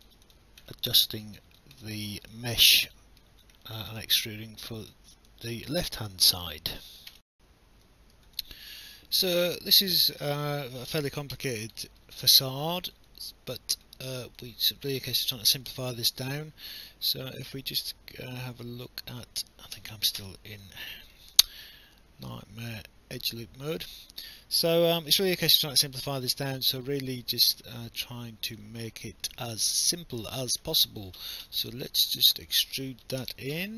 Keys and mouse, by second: 1.0 alt+middle click, 1.4 alt+click, 1.8 alt+middle click, 2.3 alt+click, 2.9 alt+middle click, 4.0 alt+click, 5.3 alt+click, 7.1 alt+F9, 8.4 alt+click, 10.4 alt+click, 10.8 alt+middle click, 12.3 alt+click, 14.0 alt+middle click, 14.4 alt+click, 15.2 right click, 17.7 click, 19.8 Escape, 20.2 w, 21.1 alt+click, 21.5 right click, 24.1 click, 25.1 shift+click, 25.6 alt+middle click, 27.0 alt+click, 29.1 alt+middle click, 30.3 alt+click, 32.4 click, 33.2 w.